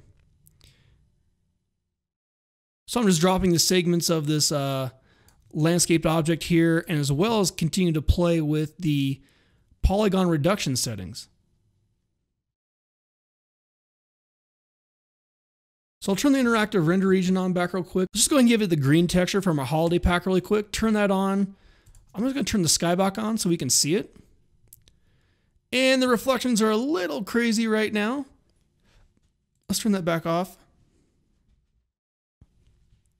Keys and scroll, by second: 15.9 alt+r.